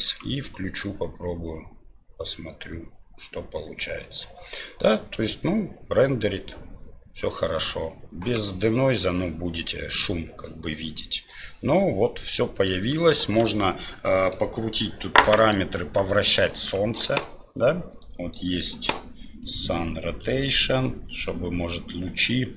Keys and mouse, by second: 0.8-2.2 drag, 8.2 click, 14.1 middle drag, 15.2 middle click, 16.6 click, 19.5-21.2 drag.